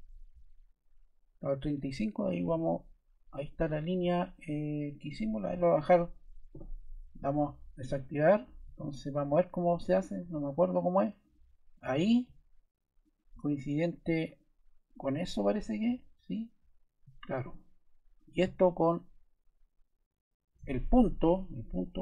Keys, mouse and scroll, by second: 1.7 ↺, 2.3-2.8 scroll, 11.1 click, 12.9 click, 14.2 click, 21.3 ↺.